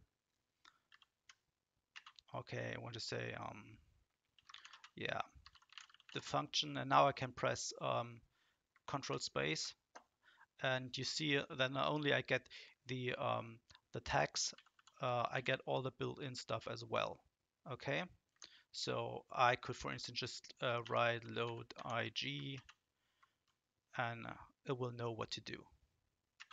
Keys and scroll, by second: 0.9 ctrl+shift+?, 1.9 space, 4.2-6.5 typing, 9.0 ctrl+space, 14.0 Down, 14.5 Down, 14.7 Down, 14.9 Down, 18.3 Escape, 20.6-22.2 typing, 22.5 ctrl+space.